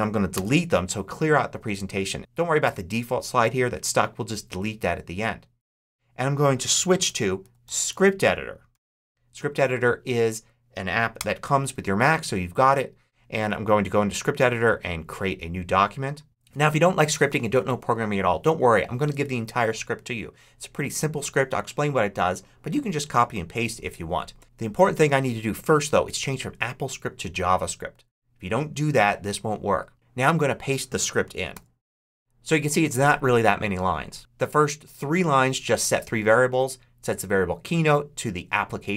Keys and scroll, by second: 0.2 shift+BackSpace, 0.7 BackSpace, 7.3 super+s, 7.5 c, 7.8 r, 8.6 i, 8.9 p, 11.0 Return, 31.4 super+v.